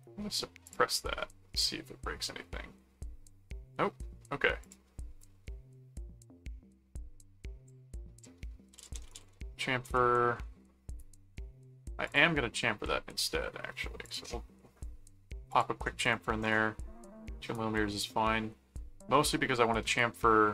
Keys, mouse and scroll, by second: 0.6 click, 4.6 click, 8.2-9.7 typing, 9.8 Return, 12.1 click, 14.0 click, 15.5 click.